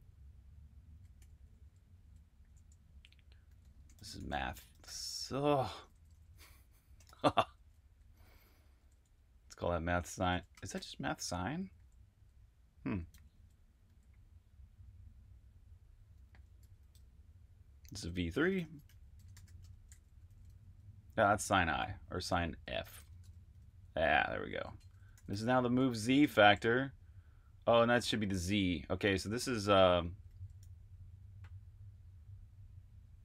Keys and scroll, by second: 1.1-10.7 typing, 4.4 Return, 11.9-13.8 typing, 16.2-21.5 typing, 22.8-23.2 typing, 25.6-26.2 typing, 29.8-31.0 typing.